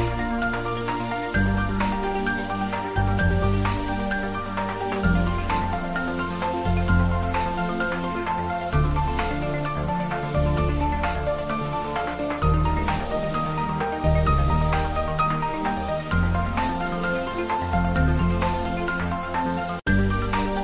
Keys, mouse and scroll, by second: 0.2 h, 0.6 u, 0.8 click, 1.0 ctrl+z, 1.7 g, 2.6 click, 2.6 Tab, 4.4 s, 5.1 click, 5.2 Tab, 5.5 ctrl+middle click, 6.6 click, 8.0 1, 10.0 click, 10.7 e, 11.3 click, 11.7 e, 12.0 click, 12.4 ctrl+z, 13.0 r, 14.4 click, 15.0 s, 15.6 click, 15.9 e, 17.4 click, 17.7 e, 19.1 click, 19.3 ctrl+z, 19.7 s, 20.1 click, 20.5 r.